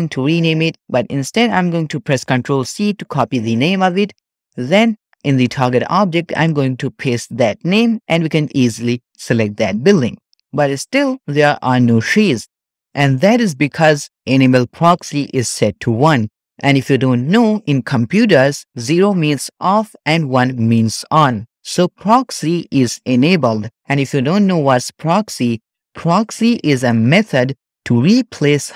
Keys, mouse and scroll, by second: 5.1 click, 6.3-9.9 drag.